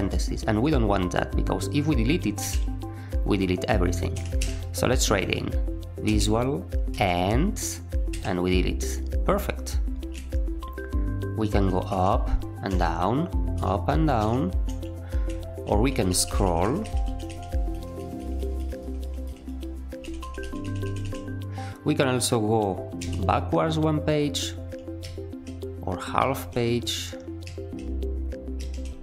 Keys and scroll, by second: 2.3 shift+x, 4.1 Escape, 4.3 u, 6.0 v, 6.8 e, 8.0 typing, 11.8 shift+h, 12.6 shift+l, 13.5 shift+h, 14.1 shift+l, 15.4 typing, 15.6 ctrl+e, 16.0 ctrl+e, 16.2 ctrl+e, 16.4 ctrl+e, 16.5 ctrl+e, 16.8 ctrl+e, 17.0 ctrl+e, 17.2 ctrl+e, 17.6 ctrl+y, 17.9 ctrl+y, 18.1 ctrl+y, 18.3 ctrl+y, 18.6 ctrl+y, 18.7 ctrl+y, 18.9 ctrl+y, 19.2 ctrl+y, 19.4 ctrl+y, 19.9 ctrl+e, 20.3 ctrl+e, 20.6 ctrl+e, 20.8 ctrl+e, 20.9 ctrl+e, 22.9 ctrl+b, 24.9 ctrl+u, 26.1 ctrl+u, 27.4 ctrl+u, 28.5 ctrl+u.